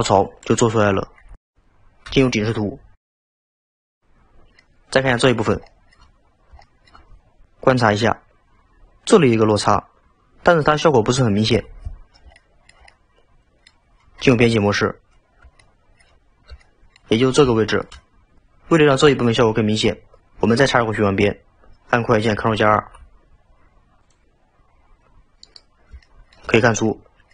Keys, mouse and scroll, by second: 1.7 KP_7, 2.6-3.3 scroll down 5, 3.6-5.2 shift+middle drag, 5.2-5.7 scroll up 5, 5.7-6.3 shift+middle drag, 6.6-7.5 shift+middle drag, 12.4-14.3 shift+middle drag, 14.3 Tab, 15.6-17.3 shift+middle drag, 17.3-17.6 scroll up 3, 17.6-18.4 shift+middle drag, 22.8 ctrl+r, 26.0-26.6 shift+middle drag, 26.6-26.9 scroll down 3, 26.9 middle click.